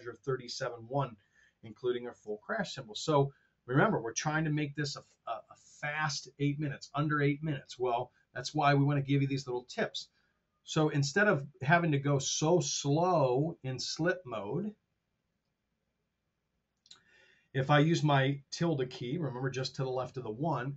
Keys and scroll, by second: 2.1 super+Tab, 11.0 super+z, 12.9 t.